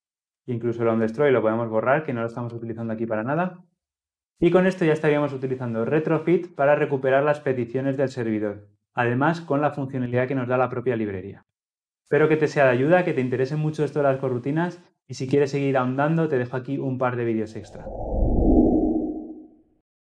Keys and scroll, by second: 3.0 ctrl+alt+l, 3.2 ctrl+alt+o.